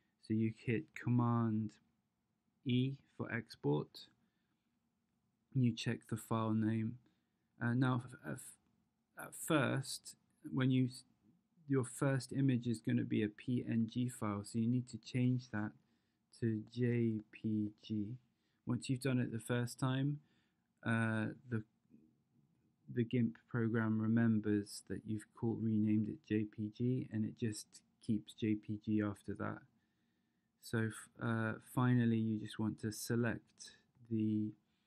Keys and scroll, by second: 2.9 super+e, 14.6 BackSpace, 14.9 BackSpace, 15.2 BackSpace, 16.7 j, 17.2 p, 17.7 g.